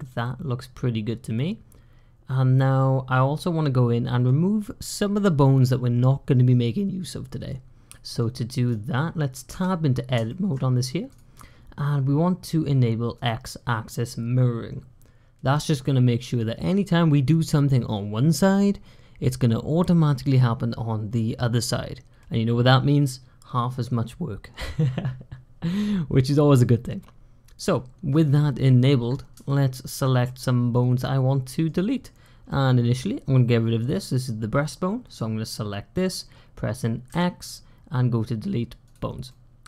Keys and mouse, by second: 1.2-2.8 drag, 2.8-4.1 middle drag, 7.8 middle drag, 9.4 Tab, 10.1 shift+click, 10.9 click, 13.0 click, 15.7 middle click, 26.7-27.9 middle drag, 29.3 shift+middle click, 30.1-31.5 middle drag, 32.3 click, 32.5 middle click, 32.7 click, 36.9 x, 39.1 middle click.